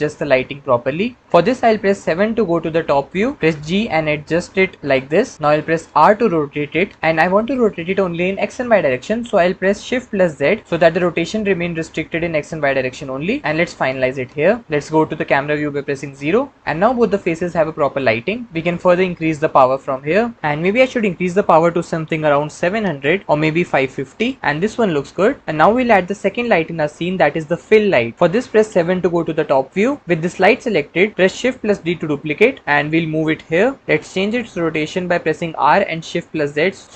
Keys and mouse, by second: 2.8 KP_7, 3.3 g, 4.8 click, 5.7 r, 14.0 click, 15.8 KP_0, 19.3-20.3 drag, 21.1-22.7 drag, 22.4 KP_0, 23.2 click, 23.6 KP_5, 28.1 KP_0, 28.9 KP_7, 31.5 shift+d, 35.3 r, 36.3 shift+z.